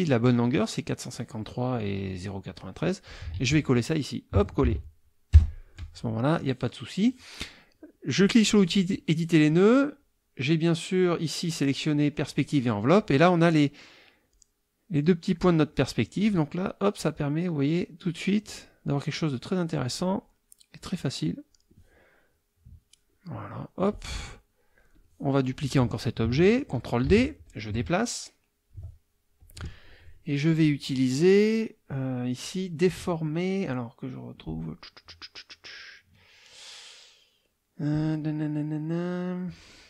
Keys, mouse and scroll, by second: 1.7 click, 3.1 ctrl+click, 3.3 ctrl+a, 4.6 ctrl+v, 5.3 Return, 8.2 click, 10.9 click, 11.4 click, 14.3-16.5 drag, 17.1-18.7 drag, 19.2 click, 20.8 click, 22.7-24.1 drag, 24.6-25.2 drag, 25.5 click, 27.1 ctrl+d, 27.5-28.9 ctrl+drag, 29.4 click, 30.5-31.0 drag, 31.9-32.6 drag.